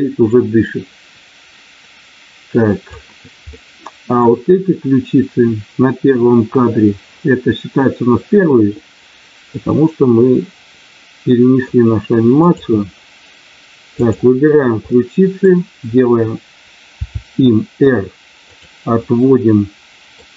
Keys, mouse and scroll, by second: 3.5 middle click, 9.4-11.6 middle drag, 12.4 click, 13.9 click, 14.8 middle click, 17.1 r, 18.4 click, 18.9-20.1 middle drag.